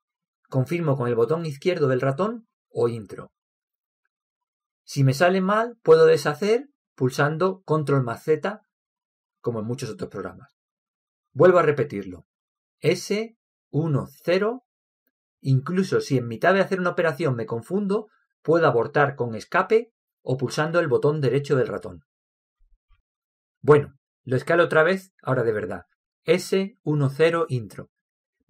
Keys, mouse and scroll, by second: 5.3 middle click, 8.6 ctrl+z, 13.3 s, 26.7 s.